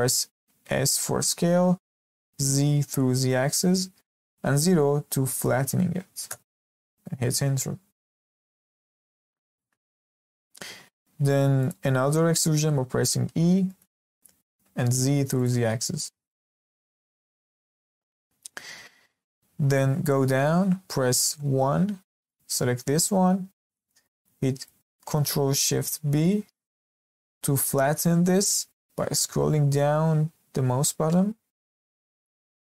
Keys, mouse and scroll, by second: 0.6 s, 8.1 shift+middle click, 8.5-8.8 scroll down 3, 8.9 shift+middle click, 9.5 g, 12.5 e, 16.2-17.8 shift+middle drag, 17.8-18.8 scroll down 1, 18.8-19.7 scroll down 1, 19.7-20.0 scroll up 2, 20.0-21.4 shift+middle drag, 21.4 1, 22.3 click, 23.6-24.0 scroll down 1, 24.0-26.0 shift+middle drag, 26.0 ctrl+shift+b, 32.4-32.8 scroll down 2.